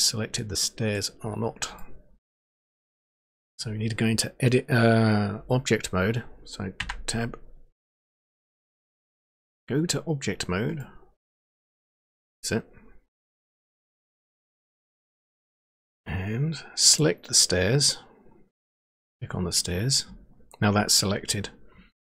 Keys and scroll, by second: 6.8 Tab, 11.6 Tab.